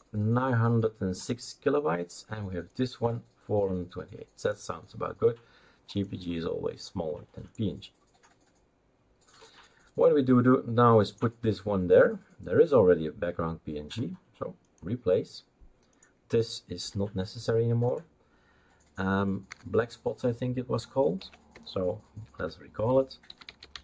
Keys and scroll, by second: 16.8 Delete, 19.5 F2, 21.2 Right, 21.5-23.8 typing.